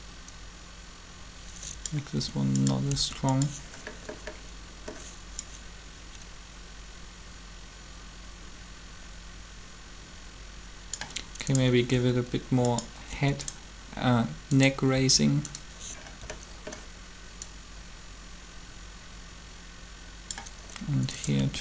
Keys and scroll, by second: 2.1 r, 2.9 r, 11.7 r, 14.9 r, 21.4 r.